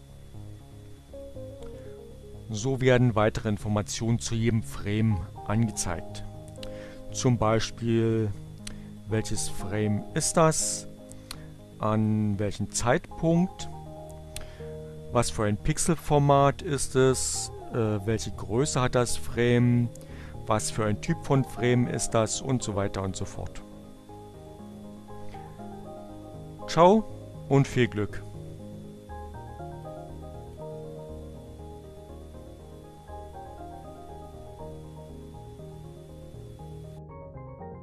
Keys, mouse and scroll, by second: 10.2-12.1 drag, 14.5-15.7 drag, 17.1-18.9 drag, 20.3-21.4 drag, 22.1-23.4 drag, 23.7 click, 29.9 click.